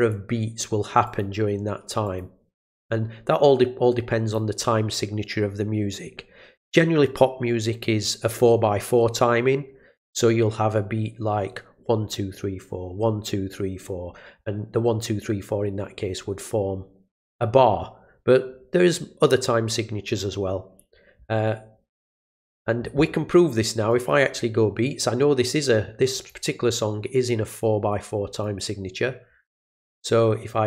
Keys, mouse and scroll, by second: 1.0 click, 2.0 click, 2.8-4.3 drag, 23.9 right click, 26.1 click, 28.4 right click.